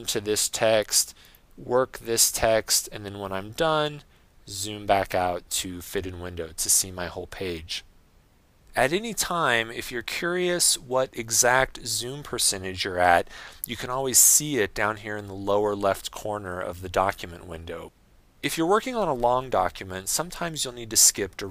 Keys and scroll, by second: 4.0 Escape, 4.5 super+0.